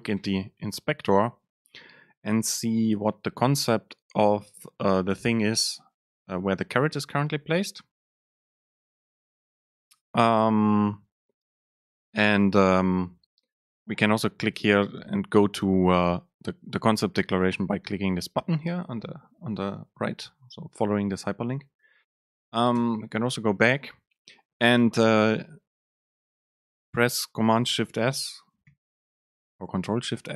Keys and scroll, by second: 22.9 alt+super+[, 28.9 ctrl+alt+shift+s.